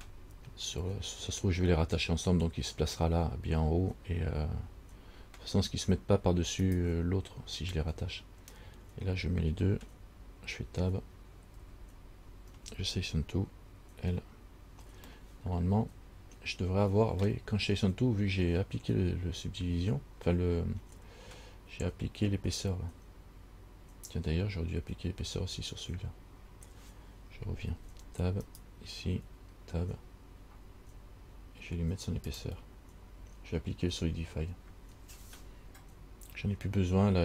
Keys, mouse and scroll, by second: 5.9 Tab, 6.8 right click, 11.7 Tab, 14.3 l, 15.3 middle click, 27.9 Tab, 28.7 right click, 29.4 Tab, 32.5 click.